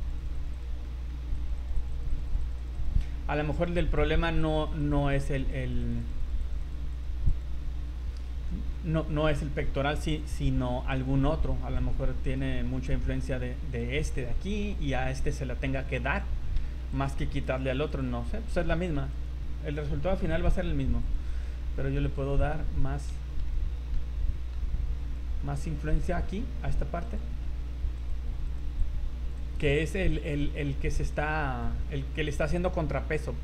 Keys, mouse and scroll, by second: 0.3 click, 0.5 click, 0.5 click, 0.9 middle click, 1.3 click, 1.7 click, 1.9 click, 2.2 click, 2.4 click, 2.6 click, 2.7 click, 3.6 click, 4.0 click, 4.4 click, 5.1 click, 5.4 click, 5.7 click, 5.8 click, 6.1 click, 6.3 click, 6.5 click, 6.6 click, 7.0 click, 7.3 click, 8.1-8.5 scroll down 2, 8.5 middle click, 10.3 v, 11.0 right click, 11.8 right click, 12.3 right click, 12.7 scroll down 3, 13.9 right click, 14.3 middle click, 14.8 scroll up 4, 15.0 middle click, 15.6 scroll up 2, 16.9 click, 18.3 middle click, 19.0 v, 19.1 right click, 20.3 click, 21.0 click, 21.4 middle click, 22.2 click, 22.8 scroll down 2, 23.1 z, 23.4 middle click, 24.5 middle click, 25.0 click, 25.5 click, 26.0 click, 26.2 middle click, 27.0 click, 27.4 middle click, 28.0 click, 28.8 click, 29.5 click, 29.8 click, 30.2 click, 30.6 click, 30.7 middle click, 31.1 click, 31.9 scroll down 3.